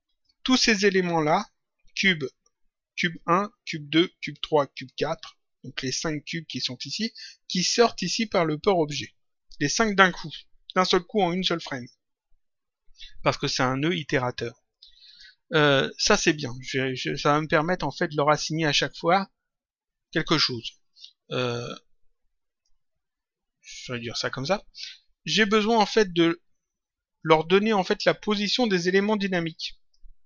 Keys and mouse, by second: 0.0 click, 15.0 click, 22.6 click, 27.1 click.